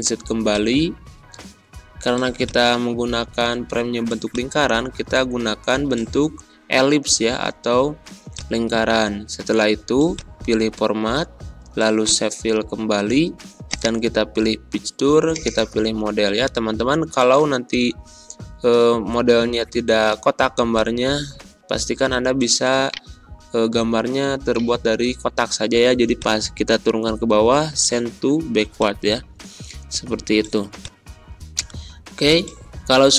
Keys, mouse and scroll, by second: 20.7-22.8 drag, 22.8 right click.